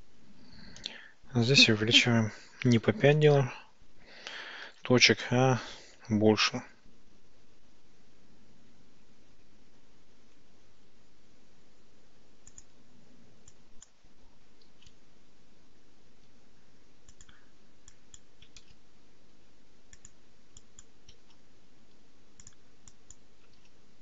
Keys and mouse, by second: 4.7 ctrl+shift+b, 12.6 click, 13.7 click, 14.7 ctrl+shift+b, 17.2 click, 18.1 click, 18.7 ctrl+shift+b, 20.0 click, 20.7 click, 21.4 ctrl+shift+b, 22.5 click, 23.1 click, 23.7 ctrl+shift+b.